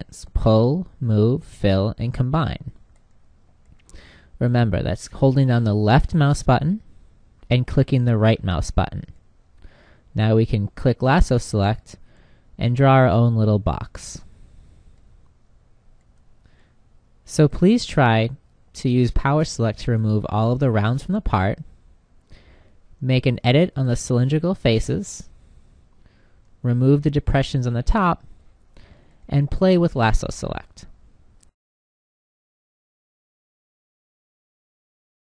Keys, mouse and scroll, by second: 6.6-10.3 drag, 8.6-12.9 right drag, 15.1 h.